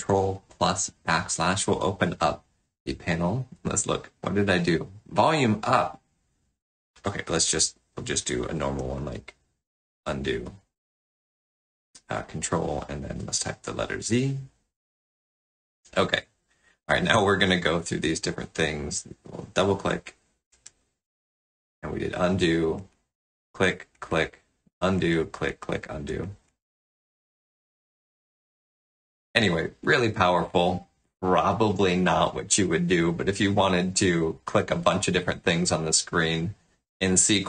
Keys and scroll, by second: 8.8 ctrl+z, 13.2 z, 15.7 space, 19.4 space.